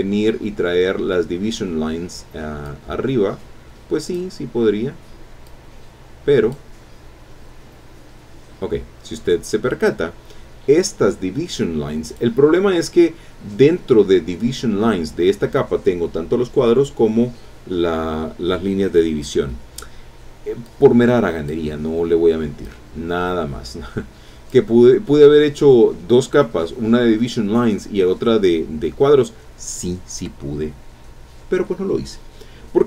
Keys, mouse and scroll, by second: 2.6-4.3 drag, 4.6 scroll up 2, 5.4-6.7 drag, 7.4-8.0 scroll down 4, 12.1 click, 13.6 scroll up 2, 20.6 click, 22.0 scroll down 2, 22.6-24.7 drag.